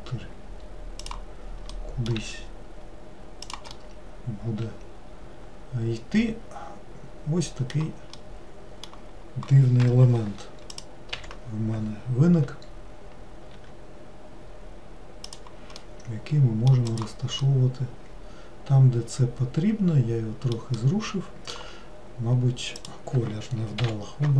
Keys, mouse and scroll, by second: 1.8 middle click, 2.3 s, 3.9-6.8 middle drag, 8.3-10.8 middle drag, 10.8 click, 11.2 l, 13.7 r, 15.9-17.0 middle drag, 17.0 click, 17.6-20.6 middle drag, 20.9-22.9 middle drag, 22.9 click, 23.9 l.